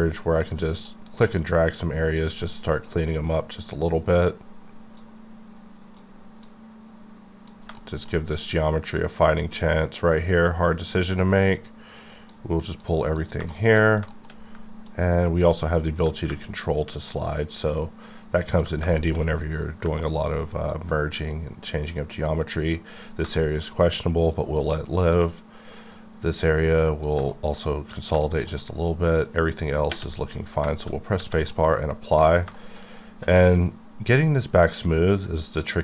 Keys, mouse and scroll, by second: 1.4 click, 3.4 click, 5.3 click, 6.4 click, 7.8 shift+middle click, 10.9 click, 13.2 click, 13.5 shift+middle click, 14.1 shift+middle click, 14.9 click, 18.9 shift+middle click, 20.1 ctrl+click, 23.4 shift+middle click, 24.6 shift+click, 26.3 shift+click, 27.3 shift+middle click, 28.2 shift+middle click, 30.2-30.6 scroll down 3, 30.7 shift+middle click, 30.9 scroll down 1, 31.5 middle click, 35.2 click.